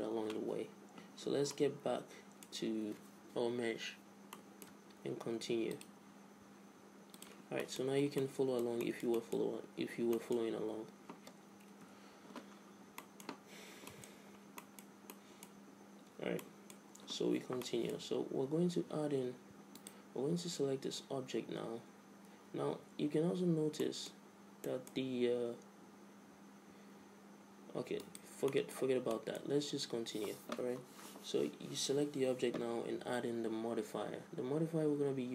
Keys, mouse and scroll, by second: 1.6-3.4 middle drag, 4.4-6.8 middle drag, 5.5 x, 7.4 click, 7.7 middle click, 8.3-9.4 drag, 9.4-12.2 middle drag, 11.9 KP_5, 12.7 middle click, 15.5-19.9 middle drag, 19.9-21.7 right drag, 22.4 a, 23.9-26.7 middle drag, 28.1-29.9 right drag, 28.6-29.9 drag, 29.9-31.1 middle drag.